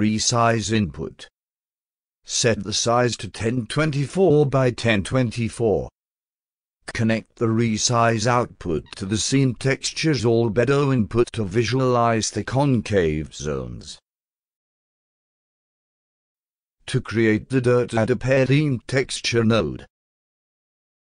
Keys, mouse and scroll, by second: 0.0-1.2 drag, 2.6 click, 3.0-5.8 typing, 6.9-7.9 drag, 10.9-12.7 alt+drag, 12.9 alt+click, 13.1-14.2 alt+drag, 14.3-15.3 alt+drag, 15.7 alt+click, 16.1 alt+middle drag, 17.3 click, 18.7 click, 19.7 click, 21.0 click.